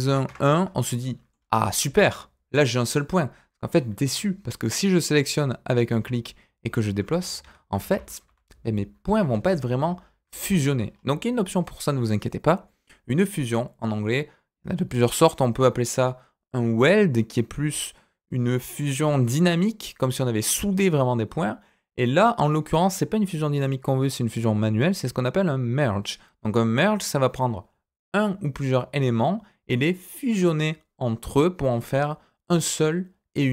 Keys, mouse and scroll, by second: 0.9 middle click, 1.4-1.7 scroll up 2, 1.7 middle click, 2.8 click, 5.9 g, 7.9 ctrl+z, 8.2 ctrl+z, 10.0 scroll down 2, 10.4 ctrl+z, 10.8-14.1 scroll up 2.